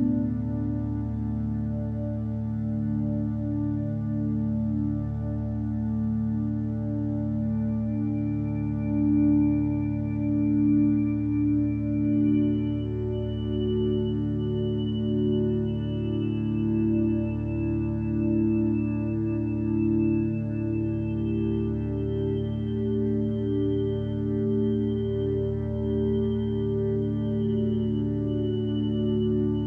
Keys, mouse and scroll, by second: 10.3 x, 11.4 x, 15.1 x, 16.2 x, 26.8 ctrl+space.